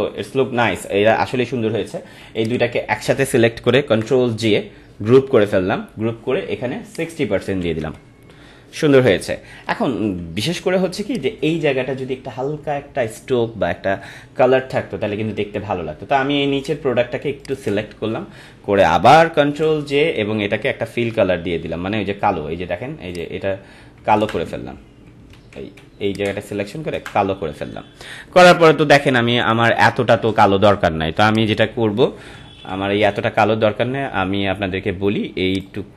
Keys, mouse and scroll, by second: 0.4 ctrl+-, 2.3 ctrl+click, 3.9 ctrl+g, 6.9 click, 9.6 click, 9.7 ctrl+=, 10.9 space, 11.1 click, 11.4 space, 16.6 click, 17.4 ctrl+click, 19.6 ctrl+j, 23.1 click, 24.2 ctrl+Delete, 25.3 z, 26.0 ctrl+click, 26.9 ctrl+Delete, 29.4 ctrl+-, 31.2 click, 32.6 ctrl+d, 35.6 click.